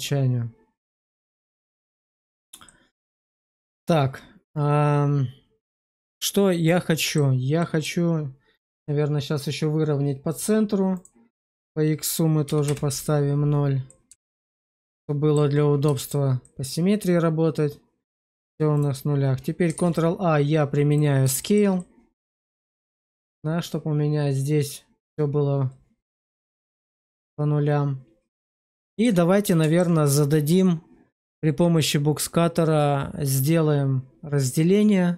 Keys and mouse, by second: 0.8 Tab, 1.4 shift+middle click, 1.8 middle click, 2.6 middle click, 3.0 shift+middle click, 5.5-7.0 middle drag, 7.5 middle click, 10.2 click, 11.4-12.6 drag, 13.8-15.2 alt+middle drag, 15.8 shift+middle drag, 16.3-18.0 middle drag, 18.2 shift+middle drag, 18.6 click, 19.8 ctrl+a, 21.3 shift+click, 21.7 click, 22.4 shift+click, 26.0 shift+middle click, 26.4-28.9 middle drag, 29.4 alt+middle click.